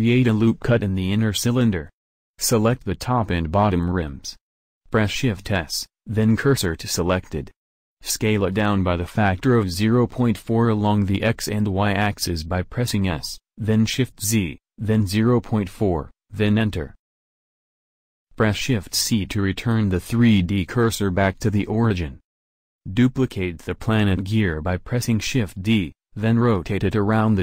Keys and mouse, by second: 1.9 a, 6.0 middle click, 8.7-10.6 middle drag, 10.9-13.5 middle drag, 13.5 s, 17.7 Tab, 18.8 shift+c, 21.2 shift+d, 23.3 shift+d, 26.1 r.